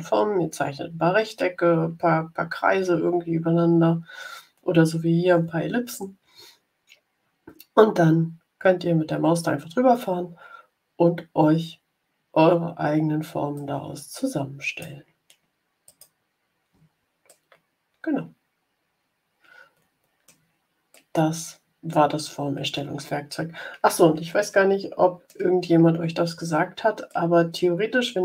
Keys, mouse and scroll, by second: 12.6-12.9 ctrl+scroll down 2, 13.5-14.9 drag, 15.8 click, 17.2-20.3 middle drag, 20.8-25.4 middle drag, 27.0-28.2 middle drag.